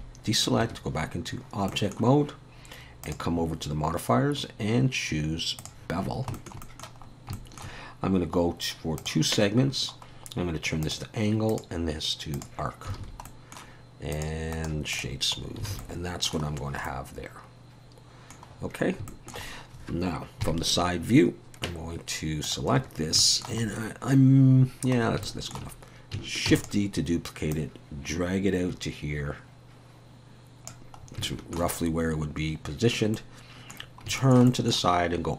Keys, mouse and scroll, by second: 0.6 Tab, 1.3-1.7 scroll down 1, 1.7 middle click, 3.0 click, 6.0 scroll down 3, 6.3 shift+middle click, 6.6 middle click, 7.0 scroll up 3, 7.3 shift+middle click, 9.0 click, 9.6-10.1 scroll down 1, 10.2 scroll down 6, 10.8 click, 11.5 click, 13.0 alt+a, 14.1 click, 14.5 right click, 15.4 scroll down 1, 15.7 alt+a, 15.8 middle click, 16.5 scroll down 1, 16.9 middle click, 18.6 scroll down 3, 19.1 shift+middle click, 20.4 KP_3, 22.5 click, 22.8-24.5 scroll up 4, 23.2 shift+middle click, 24.6-25.2 scroll down 6, 25.2 shift+middle click, 26.5 shift+d, 27.5 click, 31.0 scroll up 3, 31.2 shift+middle click, 31.8-33.2 scroll up 2, 33.2 middle click, 33.8-34.2 scroll down 3, 34.2 shift+middle click.